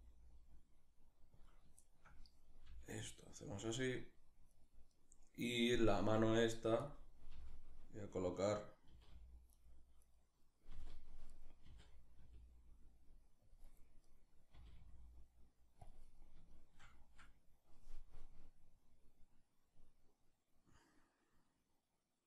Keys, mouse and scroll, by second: 1.1 click, 1.4-3.2 shift+middle drag, 2.3 g, 3.2 click, 4.2 right click, 4.6 right click, 5.8 g, 6.5 click, 7.0 g, 8.0 click, 8.5 r, 9.2 right click, 10.4 r, 11.0 right click, 11.3 r, 13.2 click, 13.7 right click, 14.2 r, 15.5 click, 16.2-17.8 shift+middle drag, 17.8-22.2 drag.